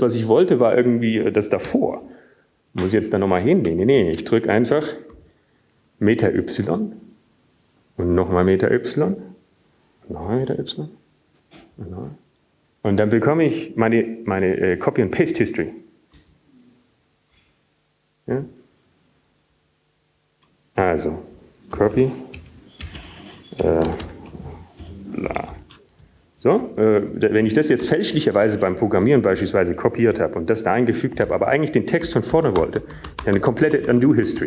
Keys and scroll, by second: 9.1 alt+y, 11.4 alt+y, 13.8 alt+y, 15.0 alt+y, 16.0 alt+y, 18.6 alt+y, 19.7-20.2 alt+y, 20.7 alt+y, 24.7-27.2 typing, 28.4 typing, 29.6-31.0 typing, 32.1 typing, 33.3 typing.